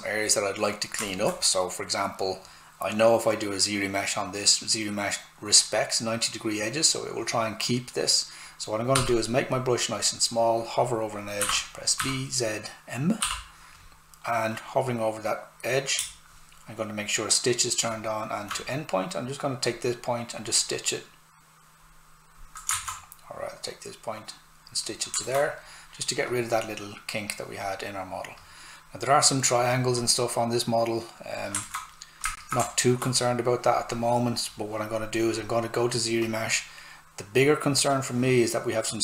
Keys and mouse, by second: 1.1 alt+right click, 9.0 s, 9.2 click, 11.4-13.2 typing, 16.0 space, 19.6 click, 22.8 ctrl+z, 23.4 click, 25.3 alt+right click, 26.3 click, 31.7 alt+right click, 32.3 shift+click, 32.7 alt+shift+right click, 33.7 click.